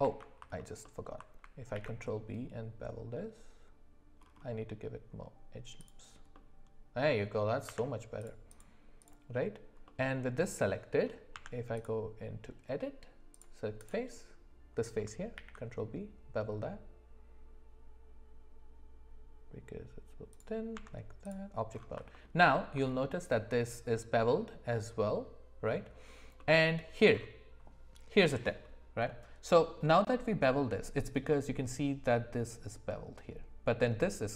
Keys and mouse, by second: 0.0 ctrl+z, 0.6 middle click, 0.8 middle click, 1.7 ctrl+b, 6.3 middle click, 7.7 Tab, 8.5 click, 9.1 click, 9.8-11.0 middle drag, 11.3 Tab, 15.4 ctrl+b, 20.7 Tab, 22.4 alt+middle click, 26.4 middle click, 29.1-29.8 middle drag.